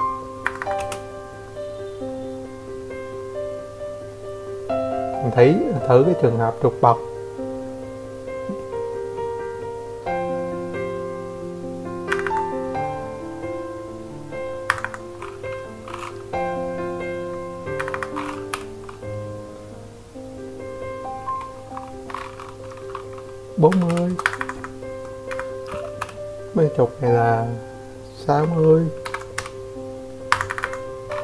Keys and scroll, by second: 4.1 Escape, 4.3 Escape, 6.7 Escape, 6.9 Escape, 9.9 Escape, 10.0 Escape, 10.6 m, 15.8 typing, 16.1 Return, 16.3 Escape, 16.5 Escape, 16.6 Escape, 17.4 Escape, 18.1 m, 20.9-21.6 typing, 22.4 Escape, 22.5 Escape, 22.7 Escape, 23.9 m, 25.5-26.2 typing, 27.9-28.6 typing, 29.9 BackSpace, 30.7 Escape, 30.9 Escape.